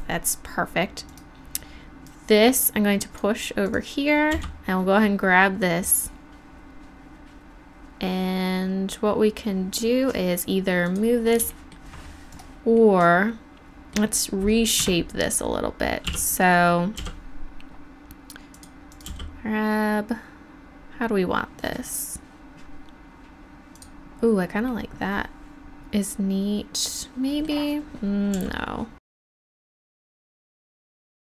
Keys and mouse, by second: 3.0-3.6 right drag, 4.3-5.4 right drag, 4.3 g, 5.4 middle click, 11.5-12.3 drag, 12.3-12.8 middle drag, 12.8-14.0 drag, 14.0 middle click, 14.1 drag, 14.8 Tab, 16.1 f, 17.0 g, 18.6 click, 19.1 g, 20.6 click, 24.8-26.8 drag, 28.4 g, 29.3 click, 29.4 g, 30.4 right click, 30.5 g, 30.8 click, 30.9 g, 31.2 click.